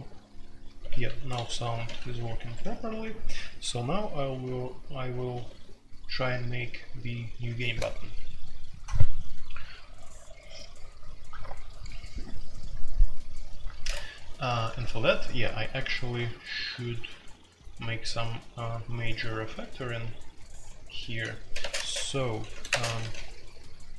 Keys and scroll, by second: 0.0-2.0 typing, 2.3 Escape, 2.6 F2, 4.1 j, 5.0 k, 5.2 k, 5.4 k, 15.7-17.2 typing, 21.6-23.0 typing, 22.5 ctrl+g.